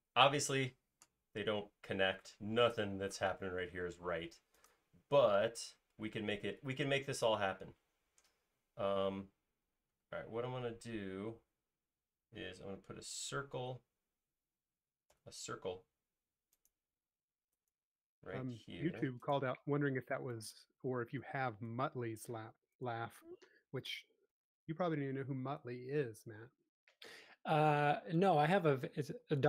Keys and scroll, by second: 13.2 d, 14.9-15.6 typing, 18.1-19.3 typing, 20.6 typing, 22.0 typing, 24.3 s, 28.2 space, 29.1 m.